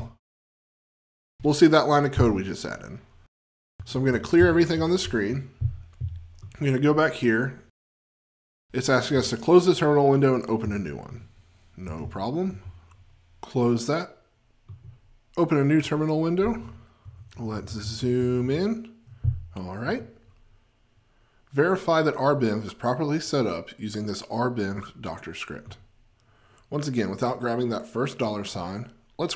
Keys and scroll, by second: 0.0 F20.